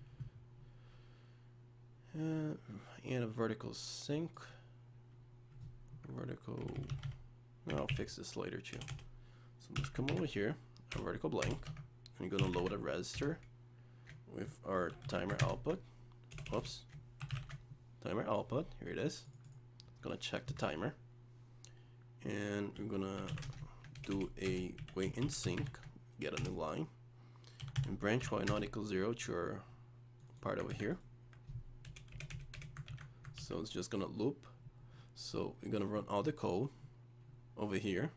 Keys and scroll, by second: 10.1 ctrl+v, 15.4 ctrl+space, 30.7 ctrl+c, 32.9 ctrl+v, 33.4 ctrl+s.